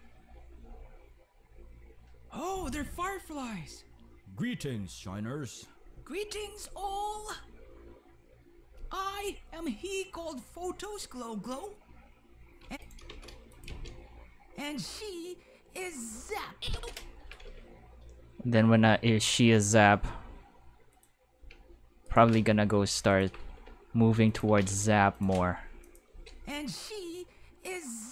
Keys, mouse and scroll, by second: 0.6 space, 12.6 space, 13.1 5, 13.5 click, 13.7 space, 16.7-17.9 typing, 19.2 click, 19.2-20.1 typing, 20.9 click, 21.1-26.2 typing, 22.0 right click, 23.1 click, 24.2 click, 25.1 click, 25.8 click.